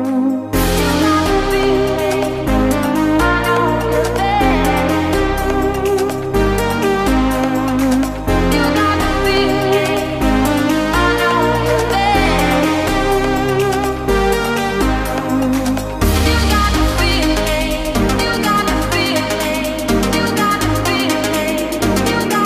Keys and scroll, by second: 10.7 ctrl+space, 11.9 ctrl+z, 13.0 ctrl+space.